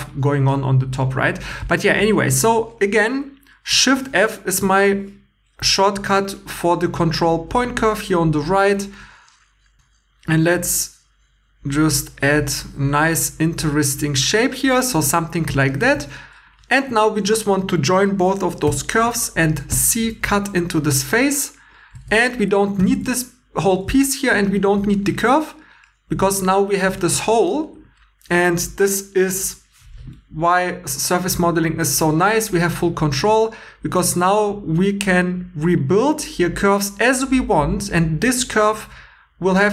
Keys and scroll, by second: 3.9 shift+f, 13.4 1, 15.1 2, 15.9 2, 18.6 j, 19.7 c, 21.9 Tab, 22.8 x, 23.8 2, 24.6 x.